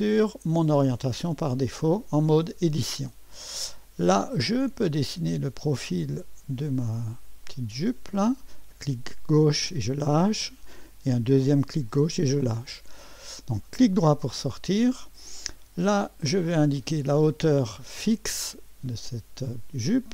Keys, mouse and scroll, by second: 0.0 click, 1.3-1.9 scroll up 1, 1.9 right click, 3.0-5.2 scroll up 1, 5.2 click, 7.4-9.8 drag, 11.7 click, 13.6 right click, 14.7-15.8 scroll up 1, 16.7 click, 18.3 click.